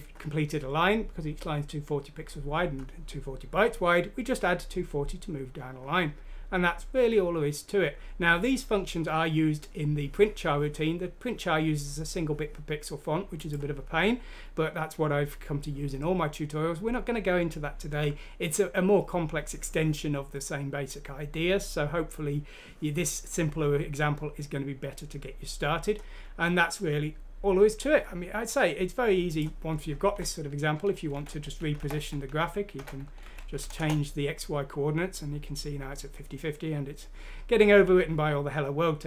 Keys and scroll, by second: 31.1 Left, 31.3 Up, 31.9 5, 32.4 Down, 32.8 5, 33.2 Delete, 33.6 F6, 33.7 Return.